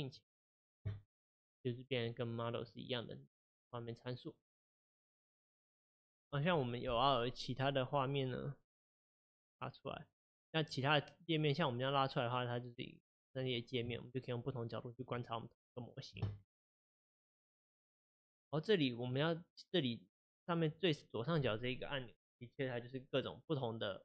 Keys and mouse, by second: 2.5 click, 3.6 click, 4.4 click, 9.0-13.9 drag, 13.9-24.0 middle drag.